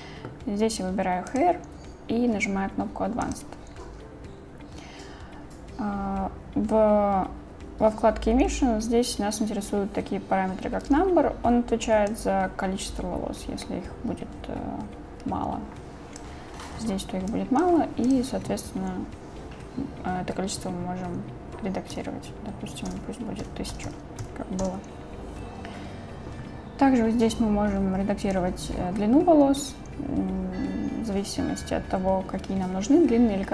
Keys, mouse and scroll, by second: 1.3 click, 3.3 click, 12.3-16.2 drag, 17.3 click, 18.1-24.7 drag, 23.9 KP_0, 28.4-30.3 drag, 32.4 click.